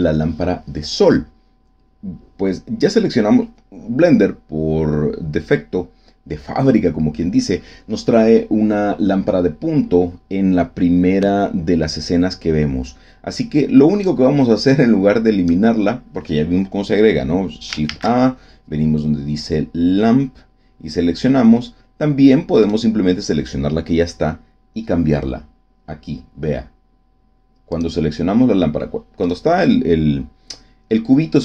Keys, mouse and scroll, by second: 13.3 click, 14.6 click, 17.8 shift+a, 22.6 right click, 27.6 click, 29.2 click.